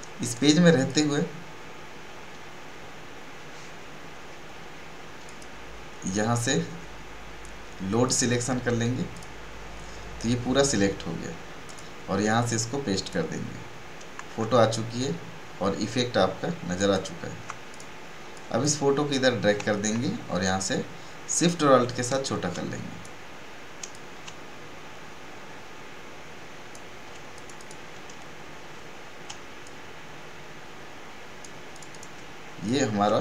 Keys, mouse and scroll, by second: 0.2 right click, 0.8 click, 8.1 click, 11.6 click, 14.5 alt+scroll down 1, 16.7 alt+click, 19.8-23.9 alt+shift+drag, 23.9-27.3 drag, 27.3 click, 29.6-33.2 shift+drag.